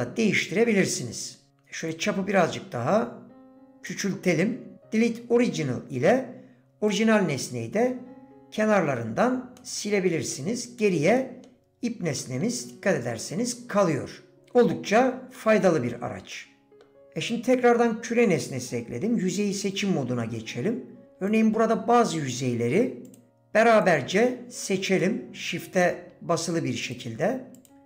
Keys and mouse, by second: 1.9-3.9 shift+drag, 7.0 click, 9.6 middle click, 11.2 middle click, 12.2 middle click, 15.4 middle click, 16.3 middle click, 21.3 alt+click, 25.0 middle click, 26.8 shift+click, 27.6 shift+click.